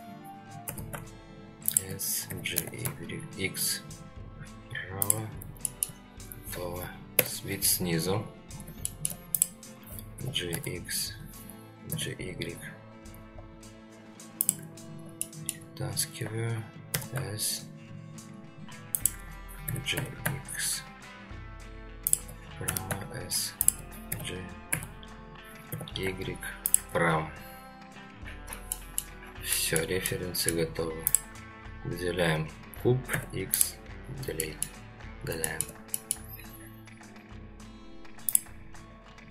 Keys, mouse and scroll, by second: 0.7 s, 2.3 g, 5.6 shift+scroll up 1, 5.7 shift+middle click, 6.1-6.5 scroll down 1, 7.1 ctrl+KP_7, 8.0-8.5 scroll up 2, 8.5 scroll down 2, 8.8 shift+middle drag, 9.3 click, 10.1 g, 14.8 scroll up 2, 15.2-15.5 shift+middle drag, 16.9 s, 19.7 g, 22.7 s, 24.1 g, 28.2-28.7 scroll down 2, 28.7 middle drag, 29.2 scroll down 2, 29.5 middle drag, 30.1-30.5 middle drag, 31.1 click, 31.9-32.4 scroll up 2, 33.1 x, 34.0-34.6 scroll down 2, 34.4 middle drag, 35.4 shift+middle drag, 35.9 middle drag.